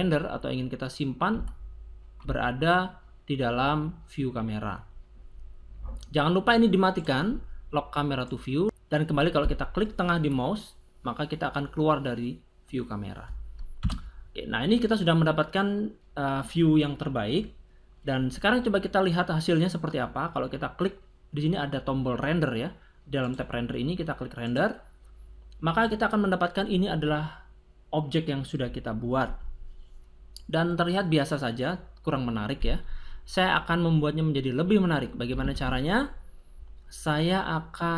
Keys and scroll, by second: 13.8 0, 35.4 Escape.